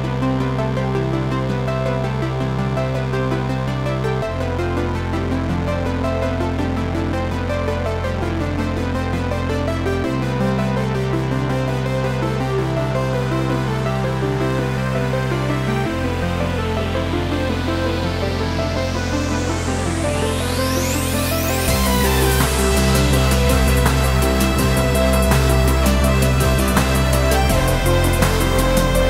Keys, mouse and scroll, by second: 0.1 scroll up 1, 1.6 Tab, 2.0 1, 2.4 shift+z, 2.7 click, 3.4 g, 4.6 click, 4.8 Tab, 5.2-8.5 middle drag, 6.2 g, 8.5 click, 8.8 middle click, 10.9 scroll up 1, 11.2 middle click, 11.8 shift+z, 12.7 shift+middle click, 12.9 KP_Decimal, 13.7 click, 15.9 Tab, 16.4 2, 16.6 click, 17.2 e, 18.6 click, 19.2 g, 19.7 Escape, 19.9 g, 20.7 click, 22.4 ctrl+r, 23.0 click, 23.7 1, 24.0 click, 24.7 g, 26.6 click, 27.2 ctrl+b.